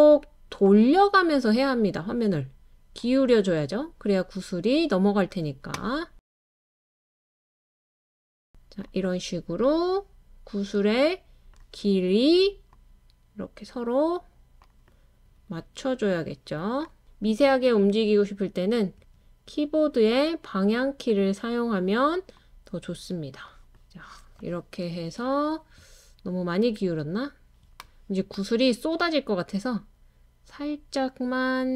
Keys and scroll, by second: 17.4 Right, 18.4 Right.